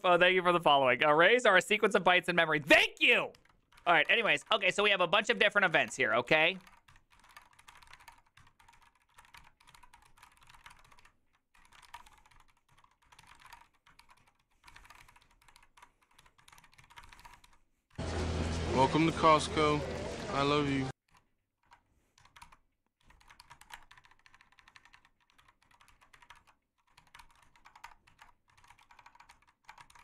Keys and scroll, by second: 3.7-30.0 typing, 5.0 ctrl+u, 25.9 ctrl+c.